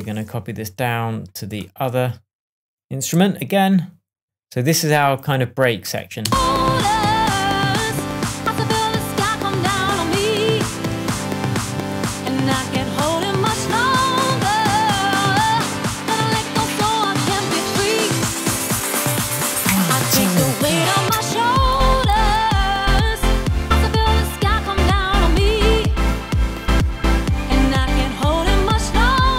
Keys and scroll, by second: 6.2 space, 10.8 a, 13.0 a.